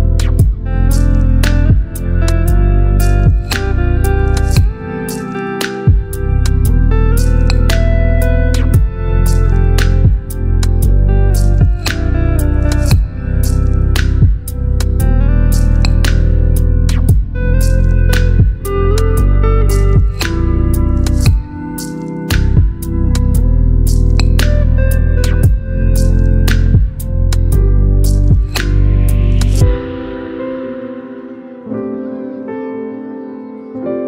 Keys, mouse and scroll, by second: 0.7 click, 2.5 shift+r, 6.0 click, 7.7 v, 8.3-10.0 drag, 11.2 ctrl+t, 13.7-19.9 alt+drag, 20.5-22.6 shift+drag, 22.9-25.8 alt+scroll up 2, 26.2-28.9 alt+drag, 29.5-30.6 drag.